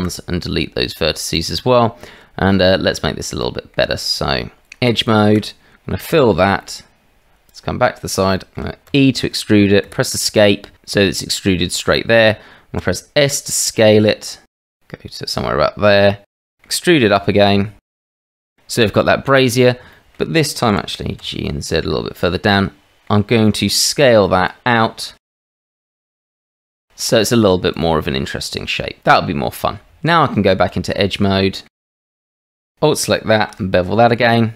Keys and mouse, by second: 0.0 Delete, 1.7 click, 2.7 shift+click, 3.4 click, 3.9 Tab, 4.9 alt+click, 6.1 f, 6.6 click, 7.5 click, 8.3 shift+middle click, 8.9 e, 12.8 s, 17.2 e, 18.4 middle click, 19.9 shift+middle click, 20.7 g, 22.6 click, 25.0 s, 29.9 Tab, 31.1 middle click, 31.8 shift+middle click, 32.2 middle click, 33.4 ctrl+b, 33.7 click.